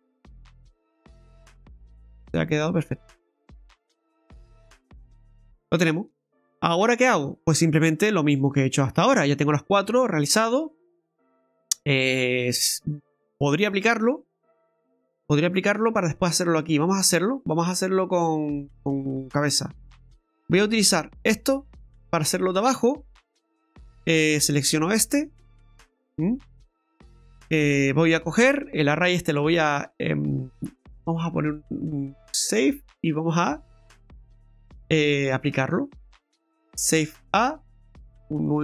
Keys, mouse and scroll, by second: 0.2 middle click, 2.8 right click, 3.2-3.9 scroll down 3, 4.0 middle click, 5.3-5.7 scroll down 5, 5.8 shift+middle click, 6.2 scroll down 1, 6.5 middle click, 6.8 middle click, 6.8 shift+middle click, 8.6 middle click, 8.6 shift+middle click, 10.0 middle click, 22.5-22.8 scroll down 2, 22.8 middle click, 24.5 right click, 25.3 right click, 29.6 click, 31.4 click, 35.4 click.